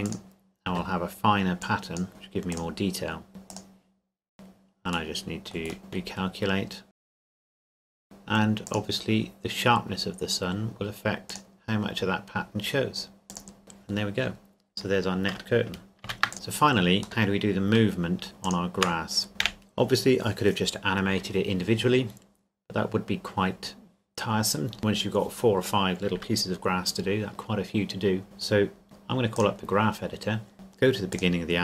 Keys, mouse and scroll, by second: 0.0 click, 0.7 Tab, 1.6 click, 4.3-4.8 scroll down 1, 4.8-5.8 scroll up 1, 5.8-6.2 scroll down 1, 6.2-6.9 scroll up 1, 6.9 click, 7.2 KP_0, 7.3 click, 7.6 shift+middle click, 7.8 click, 11.3 click, 14.4-15.8 scroll down 1, 16.0 ctrl+s, 16.3 KP_0, 16.4-17.0 scroll up 1, 17.0 middle click, 18.2 shift+click, 19.3 KP_Decimal, 19.4 KP_1, 28.2 click, 30.1-30.5 scroll down 1, 31.1 click.